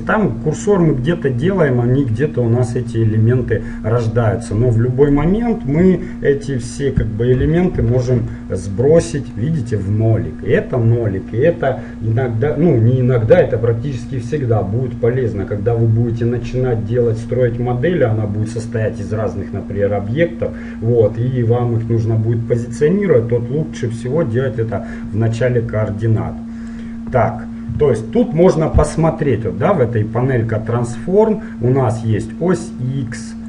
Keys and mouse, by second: 0.0-4.6 middle drag, 4.6-6.3 drag, 9.0-11.9 middle drag, 24.9-26.4 middle drag, 26.4-28.2 drag, 28.0-30.6 middle drag, 32.1-33.4 drag.